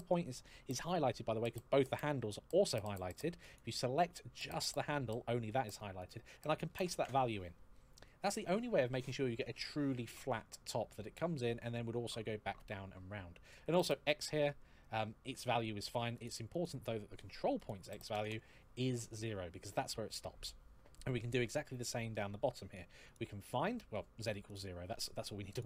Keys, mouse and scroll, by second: 2.6 click, 5.8 click, 6.5 ctrl+v, 13.4 click, 16.0 click, 17.9 KP_0, 18.0 Return, 20.3-20.6 scroll down 1, 20.7 shift+middle click, 21.5-21.9 scroll up 2, 22.8 click, 24.3 click, 25.3 click.